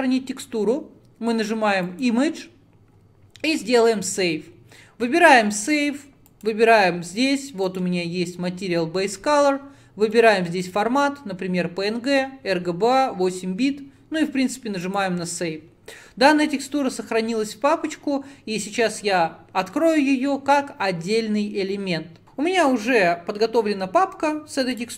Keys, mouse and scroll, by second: 4.4-15.1 drag.